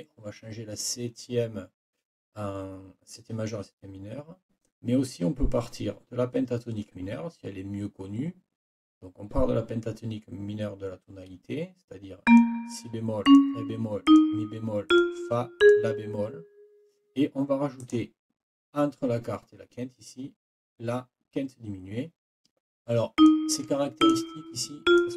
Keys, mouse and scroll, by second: 12.2 click, 13.2 click, 14.0 click, 14.9 click, 15.6 click, 17.8 click, 23.2 click, 24.0 click, 24.8 click.